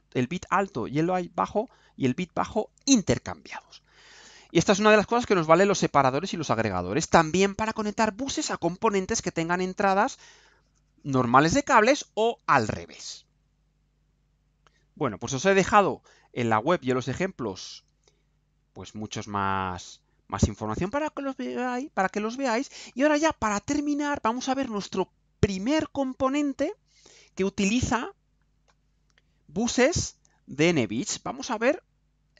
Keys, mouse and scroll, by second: 3.6 scroll down 2, 4.8-5.1 scroll down 2, 5.3 right click, 14.4 click, 17.5 click, 17.9-18.7 scroll down 4, 18.8-20.3 scroll down 6, 31.8-32.1 scroll down 2.